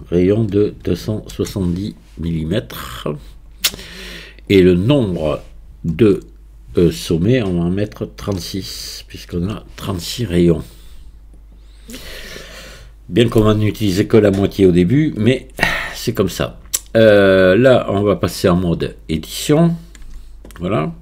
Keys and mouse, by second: 4.5-11.4 drag, 20.1 Tab.